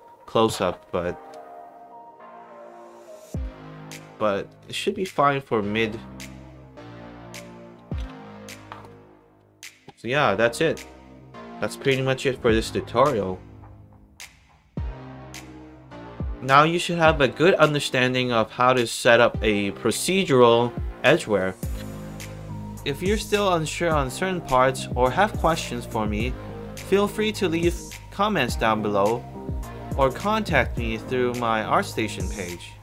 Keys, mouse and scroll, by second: 0.5 click, 2.3 click, 3.4 click, 4.2 click, 5.1 alt+right click, 6.1 alt+right click, 6.6 alt+click, 7.1 click, 8.0 b, 10.5 middle click, 10.6 scroll down 2, 12.0 alt+middle drag, 20.5-22.0 alt+right drag, 22.9 alt+right click, 23.6 alt+middle click, 24.3 alt+right click, 24.8 alt+click, 25.6 alt+middle click, 25.9 alt+right click, 26.2 alt+click, 26.8 alt+middle click, 27.1 alt+right click, 27.5 alt+click, 32.1-32.8 middle drag, 32.1-32.8 scroll up 2.